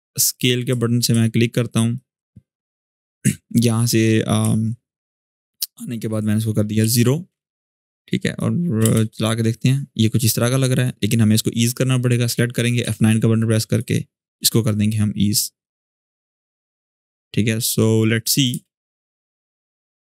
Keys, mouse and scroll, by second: 0.0 click, 1.0-1.4 shift+scroll up 1, 1.7-2.9 drag, 4.2-5.8 alt+scroll down 2, 5.8 click, 6.6 0, 6.7 Return, 7.8 click, 8.6 space, 10.2-10.8 drag, 12.6 F9, 13.4-16.9 drag, 18.2 space.